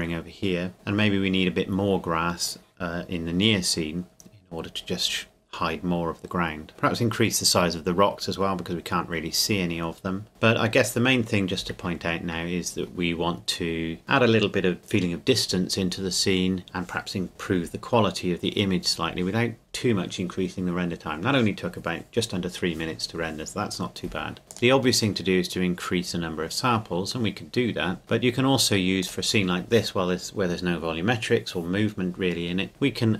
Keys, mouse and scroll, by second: 12.0 scroll up 1, 12.1-12.4 scroll down 1, 12.4 scroll up 1, 24.4 click, 28.0-29.0 scroll up 1, 29.0 click.